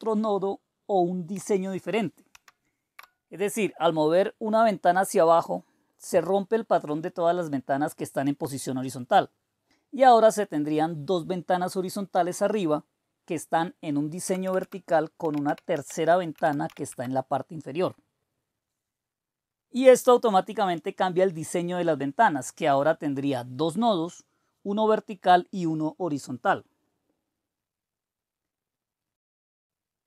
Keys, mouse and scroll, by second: 2.5 shift+super+Down, 14.2 Return, 14.4 Return, 14.6 Return, 14.9-17.1 typing.